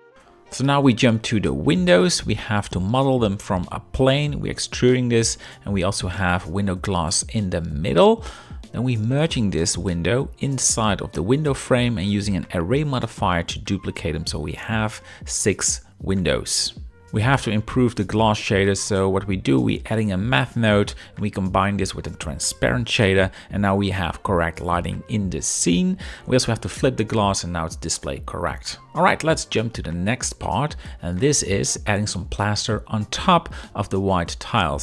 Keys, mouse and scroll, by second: 0.2 i, 2.5 Tab, 2.5 z, 2.5 KP_7, 2.6 b, 3.6 e, 5.1 Tab, 5.2 z, 5.4-5.8 middle drag, 6.0 click, 6.3 KP_7, 6.5 z, 7.0 g, 10.5 middle drag, 10.9-12.5 middle drag, 13.5 KP_7, 14.3-15.7 shift+drag, 16.3 shift+middle click, 16.3 shift+scroll, 25.5 Tab, 25.5 KP_0, 25.5 z, 30.5 KP_0, 32.0 Tab, 32.2 z.